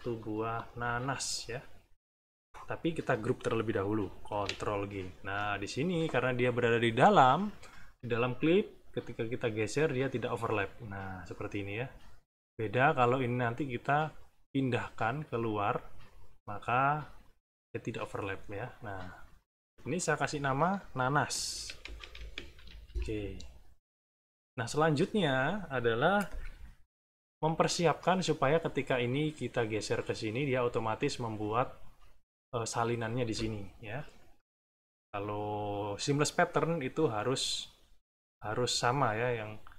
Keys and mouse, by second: 0.1 click, 2.2 click, 4.3 ctrl+g, 8.8-12.6 drag, 14.2-15.4 drag, 16.8-18.5 drag, 19.6 click, 20.3 click, 21.3-22.8 typing, 29.0-30.5 drag.